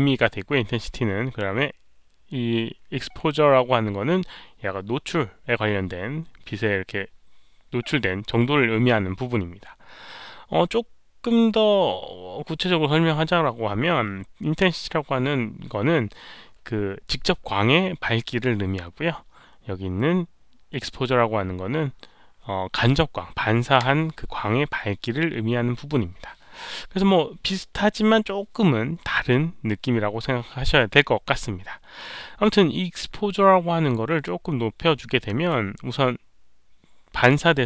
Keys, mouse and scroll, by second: 34.2-35.4 drag.